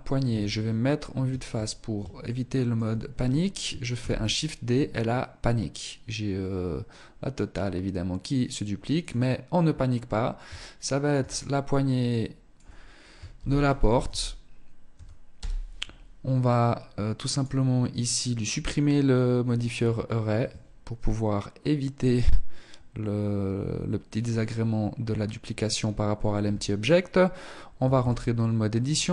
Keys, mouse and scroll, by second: 1.0 scroll down 3, 1.2 shift+middle click, 3.3 shift+d, 8.2 click, 9.9 ctrl+click, 16.5 click, 17.5 click, 18.4 scroll down 2, 18.5-19.6 scroll up 6, 19.6 scroll up 1, 25.5 Tab, 26.9 a, 27.1 a.